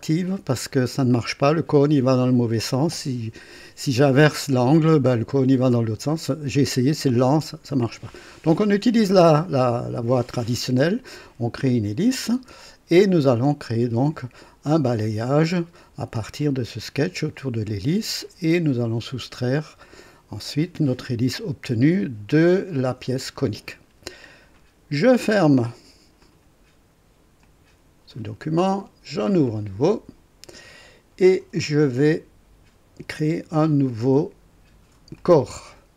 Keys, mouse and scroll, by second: 12.3 space, 26.2 click, 27.4 click, 29.4 click, 35.2 click.